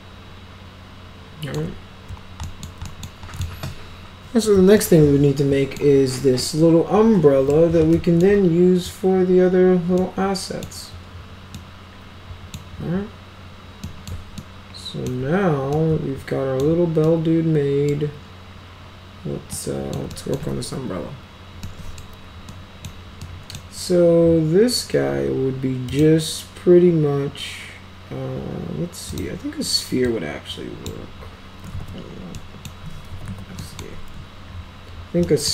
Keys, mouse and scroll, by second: 2.4 alt+middle click, 2.9 middle click, 3.4 alt+middle click, 4.8 alt+middle click, 6.4-7.6 alt+middle drag, 7.9 alt+middle click, 10.0 middle click, 11.6 middle click, 13.9 middle click, 14.4 alt+middle click, 15.8 alt+middle click, 17.1 middle click, 19.6 middle click, 20.1 middle click, 21.7-22.0 middle drag, 22.5-22.9 middle drag, 23.3-23.6 middle drag, 25.9 click, 29.1 click, 30.1 click, 31.7 ctrl+z, 32.4 middle click, 32.9-33.8 typing, 33.6 middle click, 35.3 middle click.